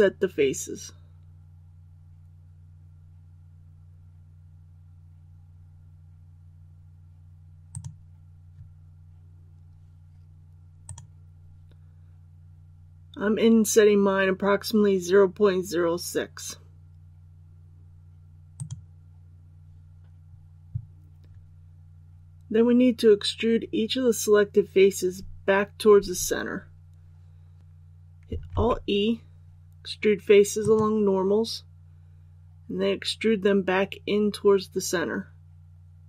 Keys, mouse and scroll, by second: 7.7 click, 27.6 ctrl+e, 28.5 alt+e, 30.6-36.0 drag.